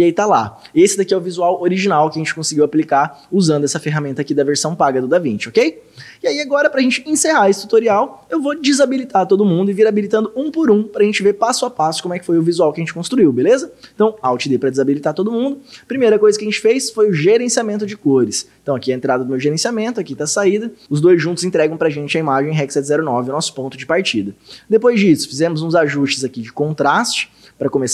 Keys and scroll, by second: 14.3 alt+d, 26.0 ctrl+d.